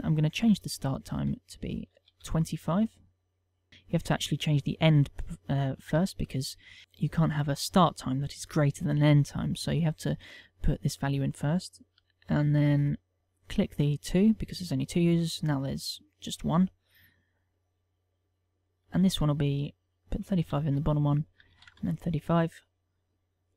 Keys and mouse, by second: 1.6 ctrl+click, 3.7 click, 5.4 click, 12.0 ctrl+c, 12.0 ctrl+v, 12.6 click, 13.2 click, 14.7 click, 19.7 ctrl+click, 20.5 click, 21.9 click.